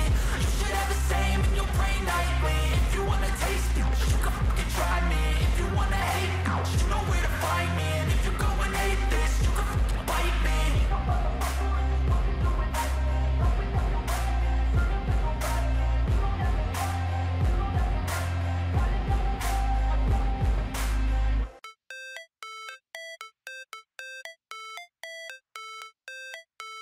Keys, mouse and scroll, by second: 0.8 f, 1.0 a, 8.9 click, 19.7-21.7 typing, 22.3 ctrl+a, 25.3 0, 25.5 Return.